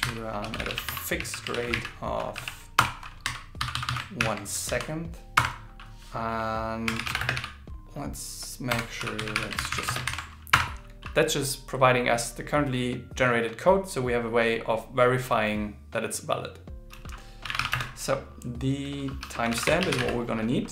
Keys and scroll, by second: 0.0 shift+8, 1.5 shift+r, 4.2 shift+l, 9.3-10.2 typing.